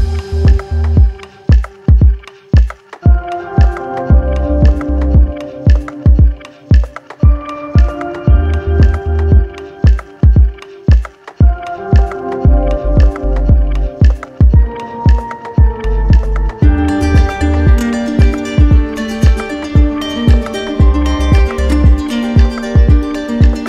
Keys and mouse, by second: 8.2-9.4 drag, 13.3-14.3 right drag, 15.6 click, 21.4 click, 21.8 alt+click, 23.3 click.